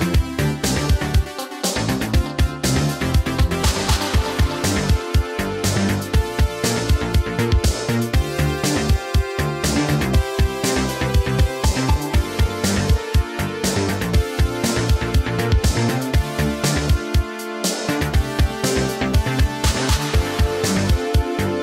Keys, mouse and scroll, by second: 1.6 space, 3.8 space, 8.0 space, 13.6 space, 21.0 space.